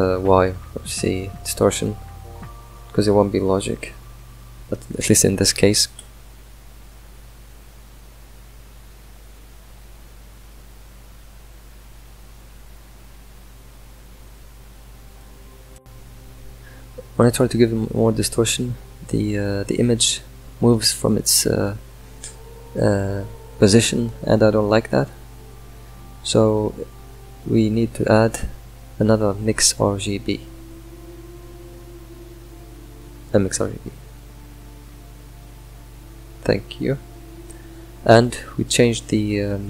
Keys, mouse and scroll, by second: 5.2 shift+click, 5.7 ctrl+scroll up 3, 8.2-22.3 shift+drag, 25.7 click, 38.0 Left, 39.4-39.6 drag.